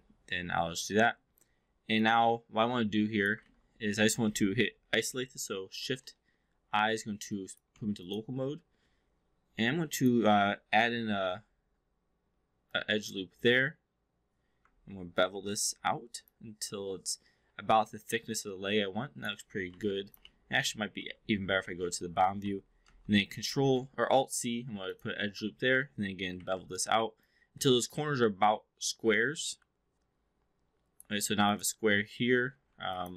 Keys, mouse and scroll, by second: 1.9 click, 3.4 ctrl+z, 5.7 shift+i, 6.8 alt+middle drag, 7.2 alt+click, 7.7 3, 8.0 click, 9.5 2, 9.9 click, 11.0 alt+c, 12.6 click, 15.2 ctrl+b, 16.2-19.4 drag, 19.8-20.2 alt+drag, 20.2 v, 21.8 middle click, 22.7 alt+c, 24.7 click, 26.4 ctrl+b, 27.2-31.1 drag, 31.3 click, 32.4 2, 32.6 3, 32.8 click.